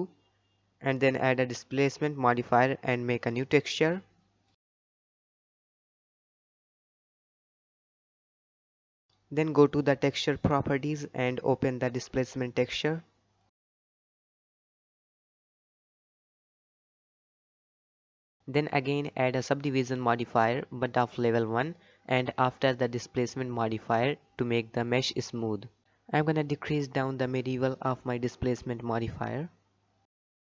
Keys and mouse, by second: 1.1 click, 1.9-3.0 drag, 4.4 click, 4.9-8.8 drag, 11.0 click, 18.6-21.1 drag, 22.9 click, 24.2-28.1 drag, 28.4-28.7 middle drag, 28.8 middle click.